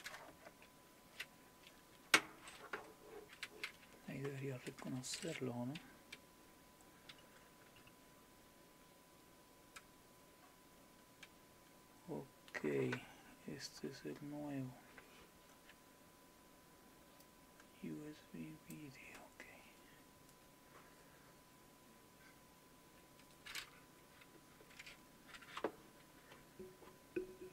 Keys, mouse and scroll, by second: 17.2-23.1 drag.